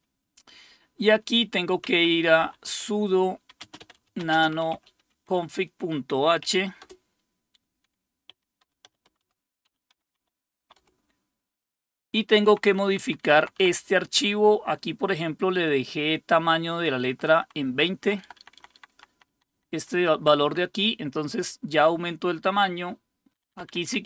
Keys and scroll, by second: 1.8-6.9 typing, 8.3-17.6 typing, 13.6 Down, 17.9 Right, 18.6 Left, 18.9 Left, 19.1 Left, 19.3 Left, 20.3 Left, 20.5 Left, 20.9 Left, 23.3 Up, 23.3 Return, 23.3 Down, 23.3 typing, 23.5 Down.